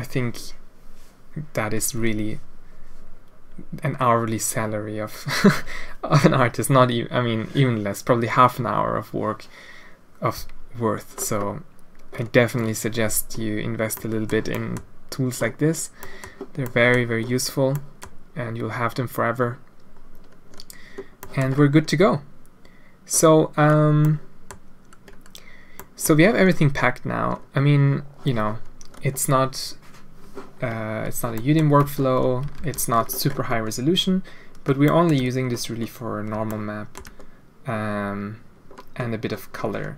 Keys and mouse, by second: 14.1 click, 14.5 click, 16.1 click, 16.7 click, 17.8 middle click, 21.3 middle click, 24.2 middle click, 25.7 middle click, 31.3 click, 31.8 Tab, 32.5 alt+a, 34.8 middle drag, 36.4-36.9 shift+middle drag.